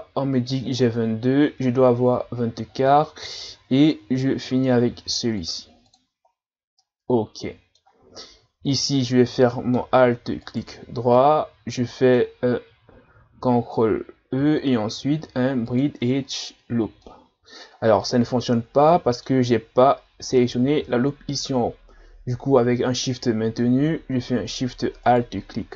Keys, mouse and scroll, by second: 1.9-2.4 scroll down 3, 2.8-3.8 scroll up 1, 4.9 ctrl+r, 6.3 scroll down 1, 6.8-10.4 middle drag, 10.4 alt+right click, 11.2-14.2 middle drag, 14.4 ctrl+e, 17.1-21.9 middle drag, 25.1 alt+shift+right click.